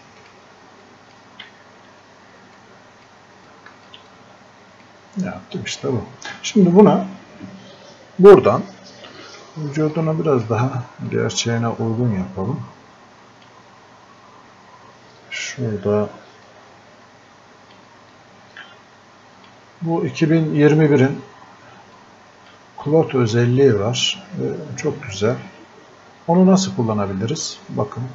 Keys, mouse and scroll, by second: 1.9 f, 2.6-15.8 drag, 4.1-6.9 alt+drag, 16.5 click, 21.9 click.